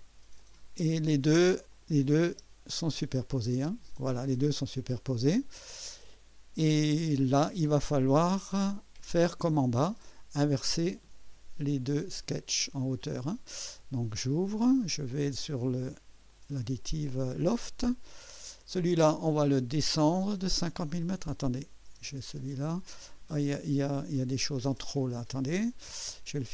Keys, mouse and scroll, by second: 0.4 click, 1.7 click, 2.3 space, 3.5 space, 4.2-7.7 drag, 8.0-9.5 drag, 10.0 click, 11.7-12.5 drag, 14.2 click, 14.8 scroll down 1, 16.3 click, 18.3 click, 21.3 click, 22.0 space, 24.6 space.